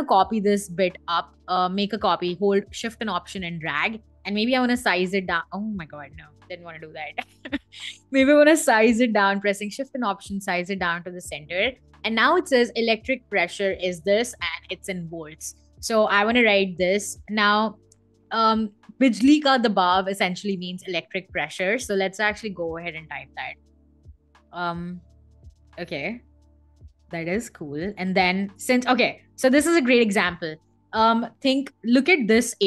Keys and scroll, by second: 5.6 super+z, 23.5 b, 23.9 i, 25.9-28.2 typing.